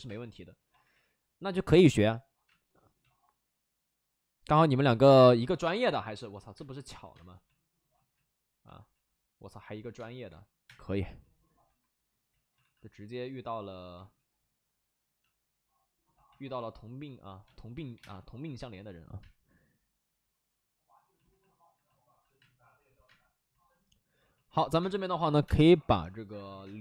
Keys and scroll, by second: 0.0 space, 1.8 space, 2.4 space, 4.4-7.0 typing, 7.8 ctrl+z, 9.9 space, 10.2 3, 10.6 space, 11.6 1, 12.2 ctrl+z, 12.5 alt+s, 13.9 ctrl+z, 16.3 alt+s, 17.4 space, 17.6 3, 17.9 3, 17.9 space, 19.1 space, 22.3 space, 23.0 space, 24.7-26.5 typing.